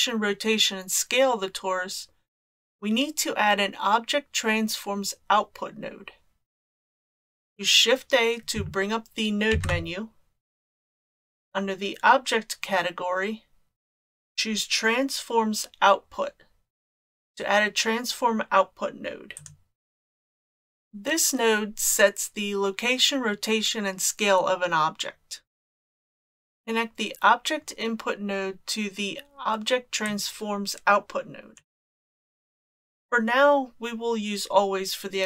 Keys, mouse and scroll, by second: 9.5 shift+a, 30.0-31.6 drag.